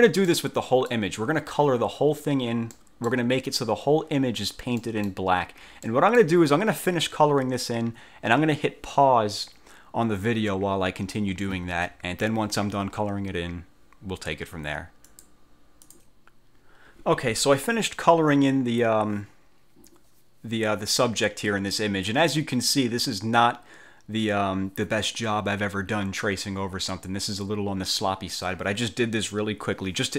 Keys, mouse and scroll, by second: 0.4 middle click, 0.6 click, 2.8 click, 3.0 middle click, 3.0 ctrl+click, 3.5-3.9 ctrl+scroll down 2, 4.9 click, 5.2 middle click, 5.2 click, 5.6 ctrl+scroll up 2, 6.0 ctrl+middle click, 6.1 ctrl+click, 6.2 middle click, 15.2 click, 15.9 click.